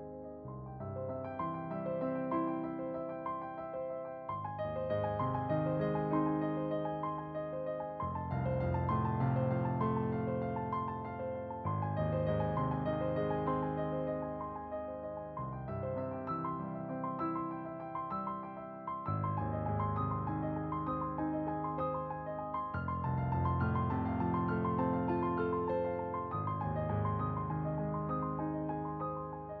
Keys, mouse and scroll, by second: 0.0 ctrl+z, 0.2-2.8 drag, 2.8 ctrl+z, 3.1-4.7 drag, 4.7 middle click, 4.8-6.7 drag, 6.7-8.1 scroll down 2, 8.1-10.1 typing, 10.0 ctrl+z, 11.2 middle click, 11.5-13.3 drag, 13.3 middle click, 13.6-14.7 drag, 14.7 ctrl+z, 15.5 shift+middle click, 15.6-20.0 drag, 20.0 f, 20.5-23.6 drag, 23.6 ctrl+z, 23.8-24.8 drag, 24.8 middle click, 26.5 shift+a, 26.8 s, 27.3 click, 28.0 ctrl+z, 28.2 click, 28.8 middle click, 28.9-29.6 drag.